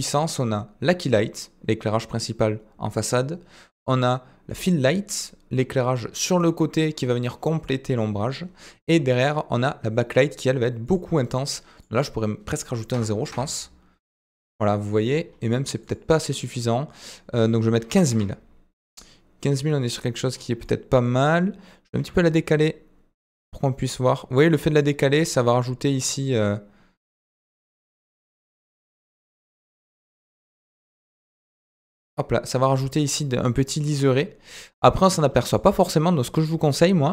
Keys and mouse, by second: 10.8-15.1 drag, 15.9-18.8 drag, 19.6-20.2 middle drag, 20.7 middle click.